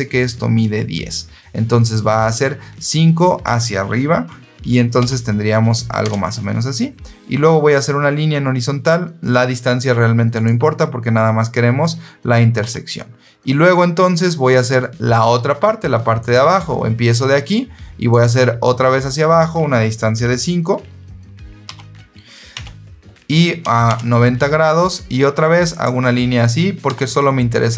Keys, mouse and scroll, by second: 4.9 KP_5, 5.9 KP_Enter, 10.2 click, 12.5 Escape, 13.2 scroll up 2, 13.4 scroll down 2, 13.9-14.2 scroll up 2, 16.1 click, 18.0 click, 21.6 KP_5, 22.4 Tab, 23.8 KP_Enter, 25.6 click, 26.8 Escape.